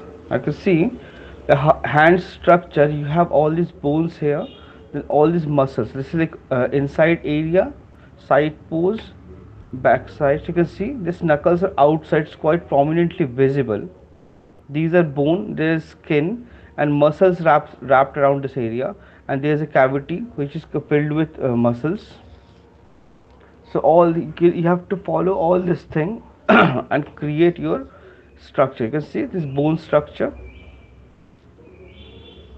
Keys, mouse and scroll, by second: 0.7 Left, 9.3 Right, 27.4 Right, 31.0 Left.